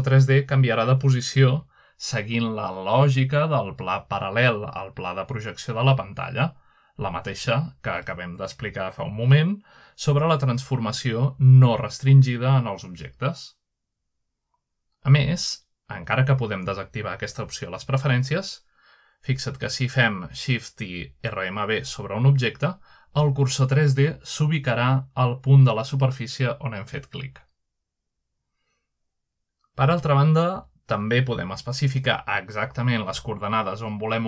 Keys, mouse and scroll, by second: 3.0-3.7 shift+middle drag, 3.6-4.6 shift+right drag, 5.8 shift+middle click, 6.1-6.9 shift+middle drag, 6.9-8.1 shift+right drag, 8.2 right click, 8.4-9.0 shift+middle drag, 9.4-10.4 middle drag, 10.1-10.7 shift+right drag, 10.7 shift+middle click, 11.2-11.6 shift+middle drag, 11.6 shift+right click, 12.6-13.3 shift+middle drag, 13.1 shift+right drag, 14.0 shift+right click, 14.1-14.7 shift+middle drag, 14.5-14.8 shift+right drag, 15.4 shift+middle click, 16.0 shift+right click, 18.2-18.7 shift+middle drag, 19.1-19.4 shift+middle drag, 20.1-20.8 shift+middle drag, 21.4 shift+right click, 21.8-23.1 shift+right drag, 24.2-25.4 middle drag, 24.4-25.2 scroll up 2, 25.9 shift+middle click, 26.3 shift+middle drag, 27.0-27.7 shift+middle drag, 27.5-28.4 shift+right drag, 28.4 shift+middle drag, 28.8-29.5 shift+middle drag, 29.5 shift+right click, 30.6 shift+middle drag, 31.0 shift+middle click, 31.5-32.0 middle drag, 31.6-32.5 scroll up 1, 32.2 shift+middle click, 32.9-33.5 shift+middle drag, 33.1-33.9 shift+right drag.